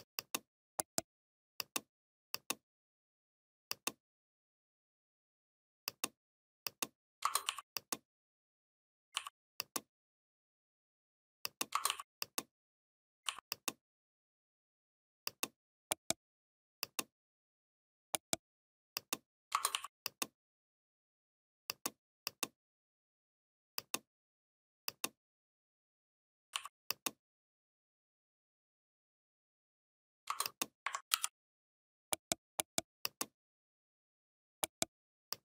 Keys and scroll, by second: 30.9 ctrl+g.